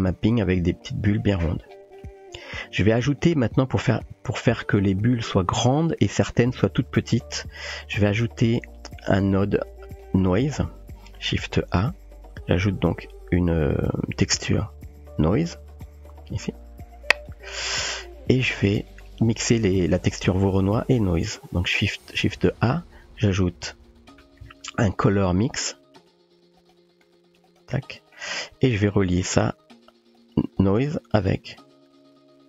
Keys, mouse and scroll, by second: 2.1 middle click, 3.2 click, 3.6 typing, 4.5-4.9 shift+middle drag, 7.2 click, 8.0 typing, 8.2 middle click, 8.9 click, 9.1-10.1 typing, 9.5-10.1 drag, 10.4 middle click, 11.1 shift+a, 15.9 typing, 16.9-17.7 typing, 17.6 middle click, 18.4-18.9 drag, 18.9 typing, 20.1 middle click, 21.8 shift+a, 27.2-28.2 typing, 28.1 middle click, 30.1 click, 30.6 typing.